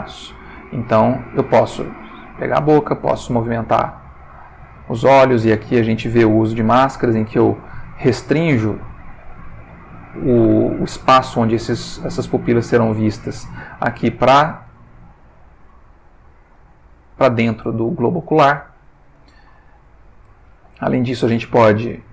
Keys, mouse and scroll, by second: 0.5 g, 1.3 click, 2.3 click, 2.9 g, 13.2 click, 13.7 s, 14.6 click, 14.7 g, 16.0 click, 16.5 g, 18.0 click, 18.6-20.2 ctrl+middle drag, 20.4 ctrl+shift+middle click, 21.1 ctrl+click, 21.5 g.